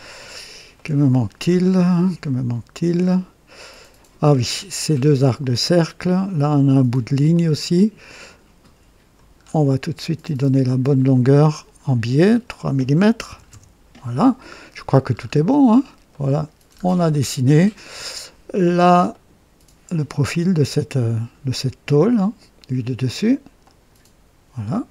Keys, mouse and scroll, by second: 0.3 scroll up 1, 0.7 right click, 1.4 scroll down 1, 2.0 right click, 3.0 scroll up 1, 3.4 right click, 4.2 scroll down 1, 5.2-5.8 scroll up 2, 5.4-6.1 typing, 7.2-8.2 drag, 9.4 scroll up 1, 10.7 click, 12.1 click, 13.2 KP_3, 13.4 Return, 15.1-15.8 scroll down 3, 16.1 right click, 16.6-17.3 scroll down 2, 17.5-18.3 right drag, 18.5 scroll down 1, 19.1-20.1 right drag, 23.5 click.